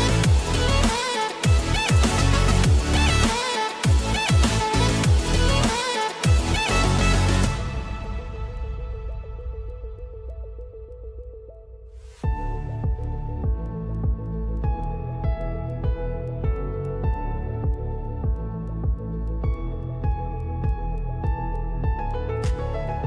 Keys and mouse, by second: 0.7 ctrl+z, 1.2-2.2 right drag, 2.2 shift+middle click, 2.3-5.5 shift+right drag, 3.3 r, 5.5 middle click, 6.2-7.9 right drag, 6.3 ctrl+z, 6.9 ctrl+z, 7.9 shift+middle click, 8.0-10.1 right drag, 8.4 r, 10.1 shift+middle click, 10.2-16.9 shift+right drag, 10.8 r, 13.1 r, 14.1 ctrl+z, 14.6 s, 15.5 ctrl+z, 16.4 click, 16.9 shift+middle click, 17.0-23.0 right drag, 19.4 g, 20.3 ctrl+z, 21.0 r, 22.1 ctrl+z, 22.4 r.